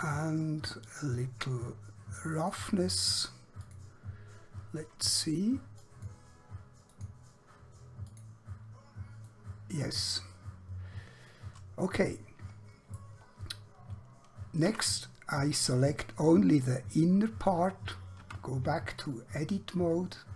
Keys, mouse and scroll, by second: 1.1 click, 9.4 middle click, 14.8 Tab, 15.8 click, 18.3 Tab.